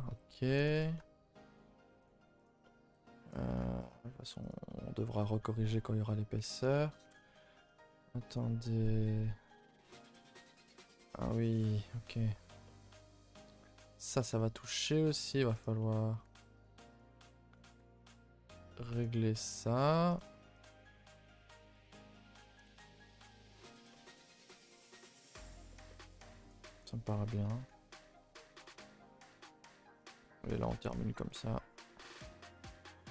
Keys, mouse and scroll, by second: 0.2 a, 0.3 a, 0.6 1, 0.8 click, 0.9-1.5 middle drag, 1.5 g, 2.4 click, 2.6-3.5 middle drag, 3.5 g, 4.2 g, 4.6-6.4 middle drag, 6.4 Tab, 7.1 KP_0, 8.3 z, 9.8 z, 10.0-10.3 shift+middle drag, 10.3-10.6 scroll up 2, 10.8 Tab, 11.4 middle click, 12.0-12.6 scroll up 10, 12.6-13.1 shift+middle drag, 13.1 scroll up 3, 13.3 shift+middle click, 14.1 click, 14.3 middle click, 14.7 g, 15.6 click, 15.8 middle click, 16.2 g, 16.9 click, 17.2 middle click, 17.7 g, 18.6 g, 19.6 click, 19.6 g, 20.1 click, 20.2 g, 20.8 scroll down 4, 21.0 Tab, 21.2 a, 21.4 a, 21.4 middle click, 22.4-23.6 middle drag, 23.6 scroll up 1, 23.9 shift+middle click, 24.1 scroll down 1, 24.3 a, 24.4 a, 24.4-25.3 middle drag, 25.3 scroll up 2, 25.7 shift+middle click, 26.4-26.7 scroll up 2, 26.7 middle click, 27.1 scroll down 2, 27.3 a, 27.5 a, 28.1 click, 28.2 Tab, 28.4 scroll up 2, 28.6 a, 28.7 a, 28.9 middle click, 29.9 click, 30.1 2, 30.6 click, 30.9 shift+click, 31.1 shift+middle click, 31.9 e.